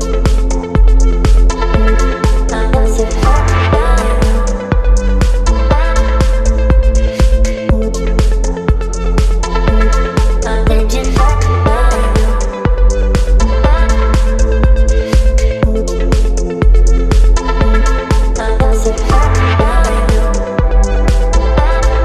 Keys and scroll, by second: 7.0 v, 7.5 Down, 7.9 Down, 8.0 Down, 8.1 Down, 16.4 space, 18.0 space, 21.1 ctrl+c, 21.8 t.